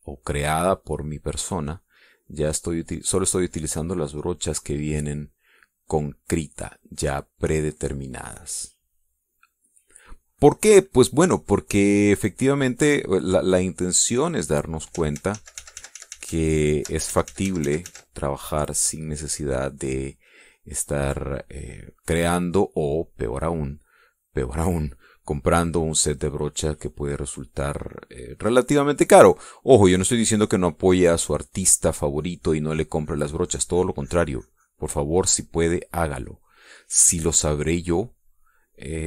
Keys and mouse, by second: 5.6 middle click, 10.2 click, 12.3-15.8 drag, 16.2 ctrl+z, 19.5 click, 20.0-24.7 drag, 26.8-30.1 drag, 31.2-36.6 drag, 37.0-39.0 drag.